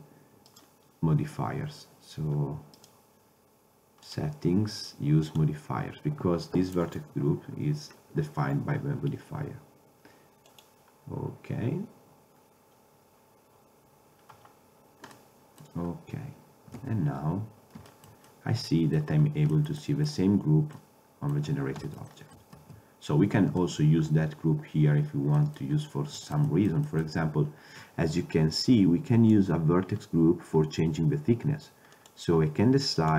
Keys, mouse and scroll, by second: 0.2-0.6 drag, 0.9-2.9 drag, 3.0-4.2 drag, 5.7 drag, 15.3 middle click, 17.5 ctrl+Tab, 21.3 middle click, 23.1 ctrl+Tab, 24.3 ctrl+Tab, 28.7-30.5 drag, 32.1-33.1 drag.